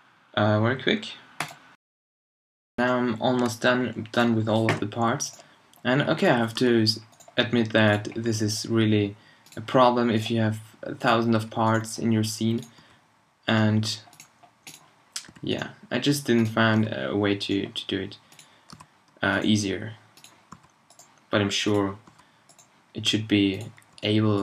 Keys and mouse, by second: 1.9 middle click, 2.8-4.2 drag, 4.7 h, 6.6 h, 8.2 h, 9.8 h, 11.4 h, 12.8 h, 15.2 h, 16.8 h, 18.8 h, 20.5 h, 22.1 h, 23.9 h.